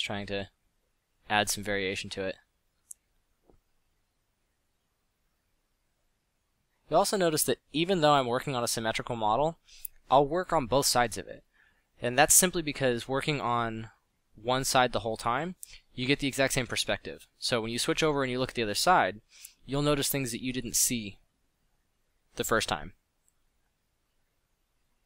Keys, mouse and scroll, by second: 0.9-1.4 middle drag, 3.9 middle drag, 7.7 middle drag, 13.1 f, 18.3 f, 21.2 f, 23.5 f, 23.9 f.